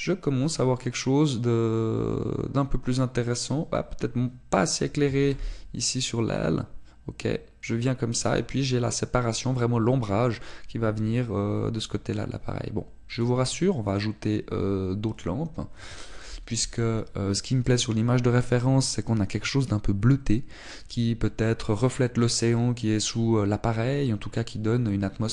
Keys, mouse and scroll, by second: 6.0 g, 7.4 click, 14.1 click.